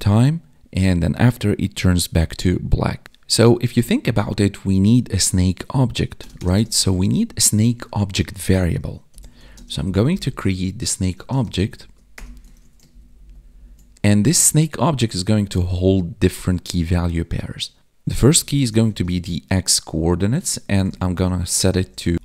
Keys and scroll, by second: 7.2 Up, 9.5 space, 11.1 space, 11.4 space, 12.5 ctrl+s, 12.9 ctrl+Down, 18.8 space.